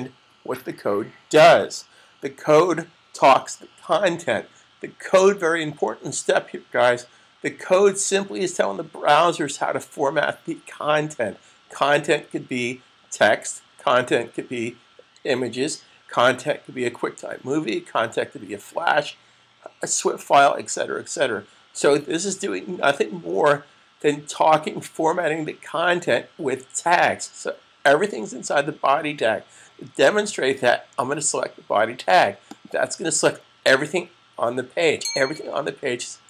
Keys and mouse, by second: 32.3 click.